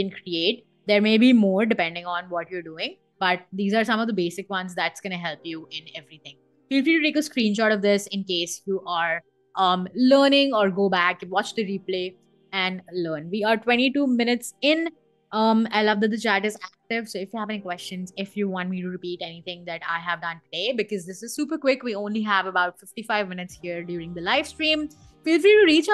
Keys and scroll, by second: 4.3 BackSpace, 6.9 BackSpace.